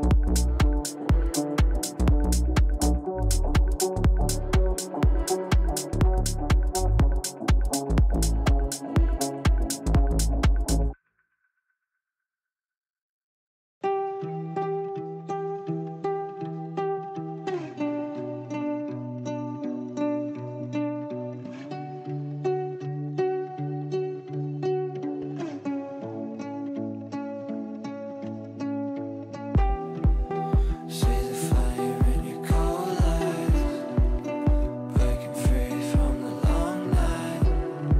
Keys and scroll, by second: 26.0 g.